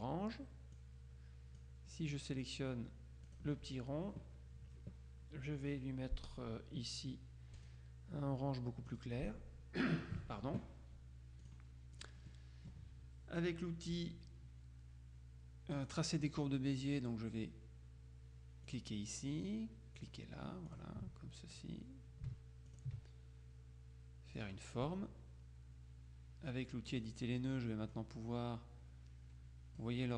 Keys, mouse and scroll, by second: 0.9 click, 3.4 click, 7.6 click, 9.0 click, 11.5 click, 12.4 click, 16.0 click, 18.8 click, 20.0 click, 20.8 click, 22.8 ctrl+click, 24.5 click, 27.0 click, 28.0-30.1 drag.